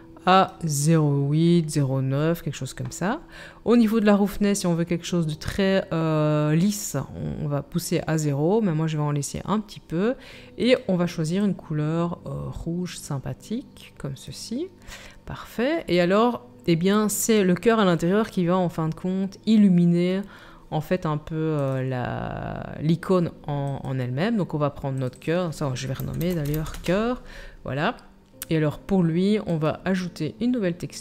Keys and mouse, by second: 23.8-31.0 right drag, 24.9 click, 24.9 middle click.